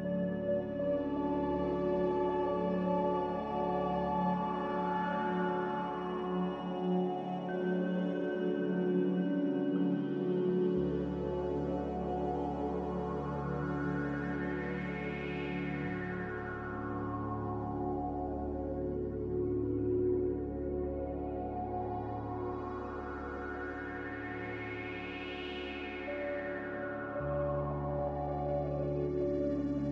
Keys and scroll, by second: 2.5 5, 29.1 F9.